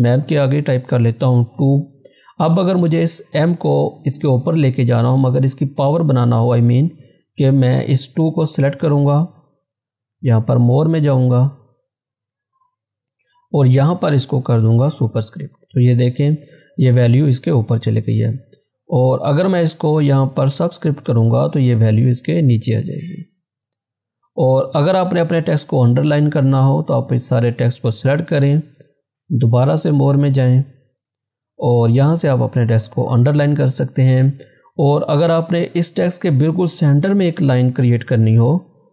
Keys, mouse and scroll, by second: 1.6 2, 8.1 2, 8.2-10.4 drag, 15.0 click, 18.8 click, 24.1 click, 26.8 click, 32.9 click, 38.2 click.